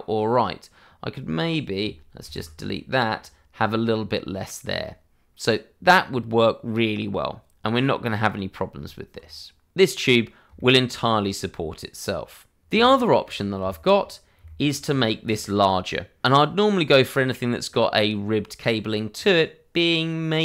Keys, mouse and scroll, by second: 2.2 ctrl+x, 6.0-6.3 scroll down 1, 8.7 Tab, 10.5 shift+middle click, 13.2 scroll down 1, 13.5 shift+middle click, 14.4 scroll up 1, 14.8 shift+middle click, 15.1 scroll up 1, 15.4 click.